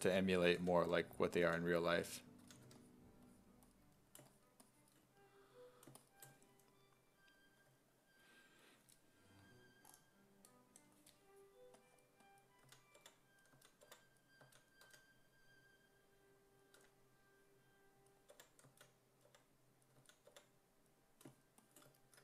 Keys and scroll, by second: 0.0-3.2 typing, 12.7-14.9 typing, 16.8 w, 18.3-20.3 typing.